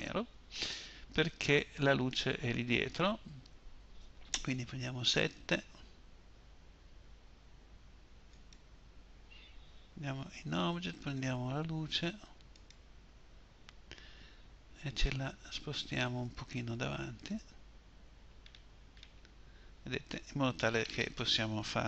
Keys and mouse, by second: 3.9 KP_7, 9.4 Tab, 14.1 g.